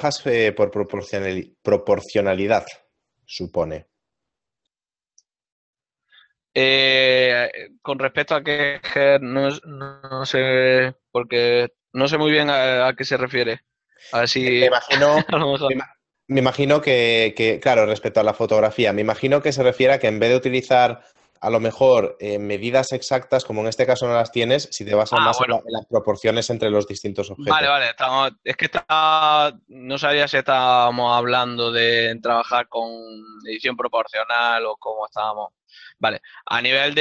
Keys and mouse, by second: 0.0 middle click, 0.7 KP_0, 32.1 g, 33.0 right click, 34.7 o.